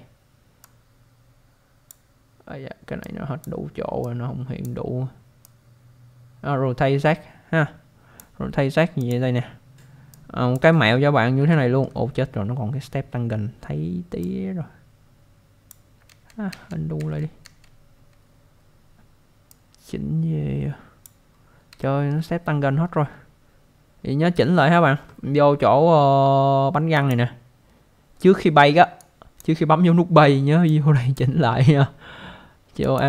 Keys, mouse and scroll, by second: 0.6 click, 3.0 click, 4.0 click, 5.4 click, 9.0 click, 10.9-11.4 scroll up 1, 11.5 alt+middle click, 14.2 click, 16.1 ctrl+z, 19.5 click, 21.3-21.7 scroll up 1, 21.8 alt+middle click, 22.8-23.2 scroll up 1, 24.0-24.7 scroll down 1, 26.9 click, 29.0 click, 30.7 click, 32.8 click.